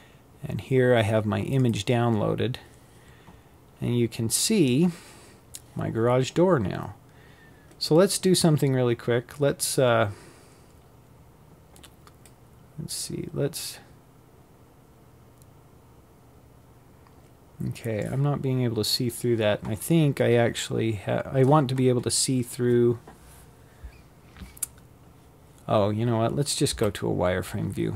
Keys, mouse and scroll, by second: 10.0-12.9 drag, 24.5 z.